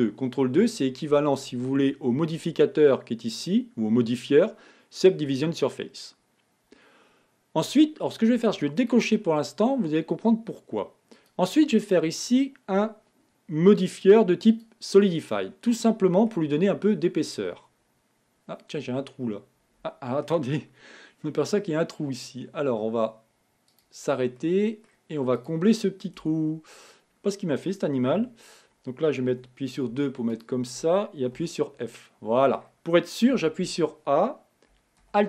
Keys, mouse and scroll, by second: 0.1 ctrl+2, 3.6 click, 9.2 click, 11.6-14.5 drag, 15.9 middle click, 16.7-17.3 scroll up 5, 17.3-17.8 scroll down 2, 17.8-20.8 middle drag, 24.0 click, 24.7-25.7 middle drag, 25.7 click, 26.5 Tab, 27.0 scroll up 2, 29.6 2, 30.7 shift+click, 31.7 f, 32.3-33.7 middle drag, 33.7 a, 34.0 a.